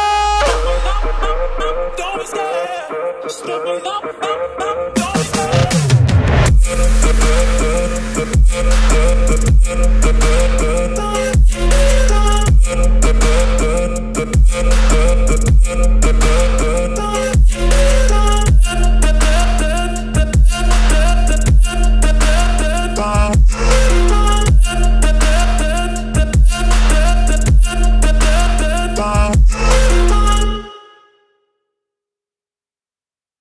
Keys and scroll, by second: 3.4 F3, 4.1 Escape, 8.2 space, 10.0 shift+Page_Down, 11.2 Escape, 27.9 space, 28.2 Escape, 30.2 shift+F2, 31.3 F9.